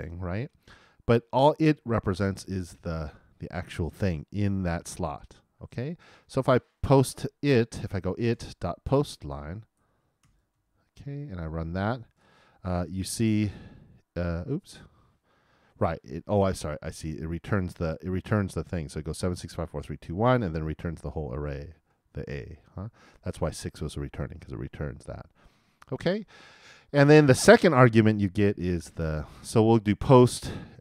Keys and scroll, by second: 11.0 super+n, 11.5 super+Return.